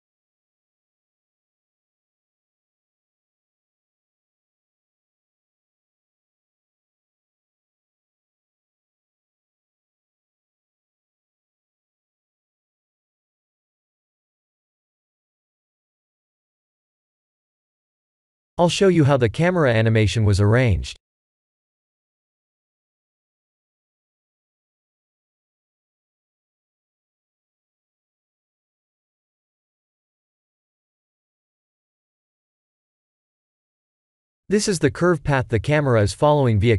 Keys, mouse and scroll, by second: 16.2 click, 17.2 click, 20.3 click, 22.3 click, 22.9 click, 24.5 click, 26.1-26.9 scroll down 4, 27.8 click, 28.8 click, 30.1 click, 32.1 click, 33.3-34.4 scroll down 6, 34.4 middle click.